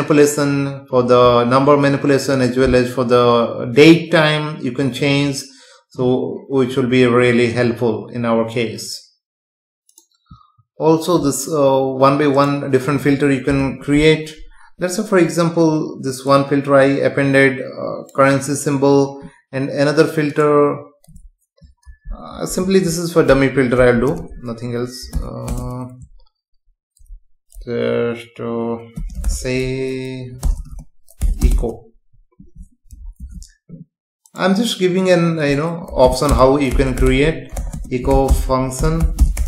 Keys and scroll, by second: 13.4 space, 24.1 BackSpace, 25.4 space, 30.4 BackSpace, 33.2 ctrl+s, 36.3 Return, 37.7 space, 38.8 BackSpace.